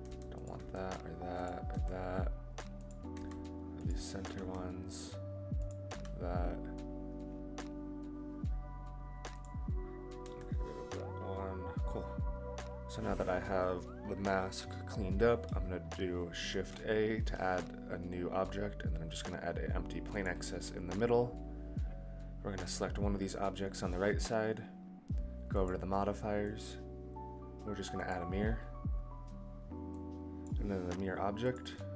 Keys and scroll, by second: 10.2 Delete, 16.4 shift+a.